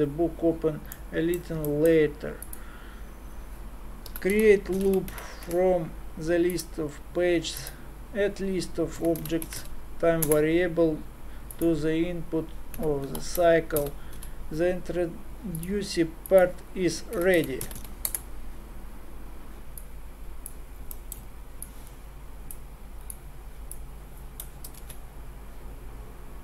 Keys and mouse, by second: 1.5 middle click, 2.4-5.2 drag, 7.6-15.3 drag, 20.5-24.8 drag, 24.8 shift+a.